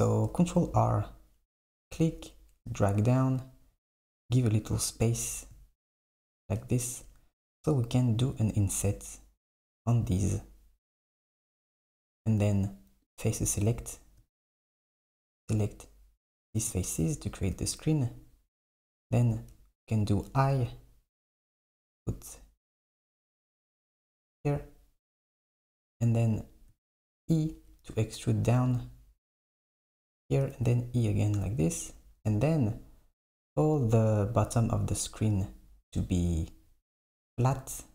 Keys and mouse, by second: 0.7 ctrl+r, 13.1 click, 14.8 click, 27.0 e, 30.5 e, 32.3 KP_8.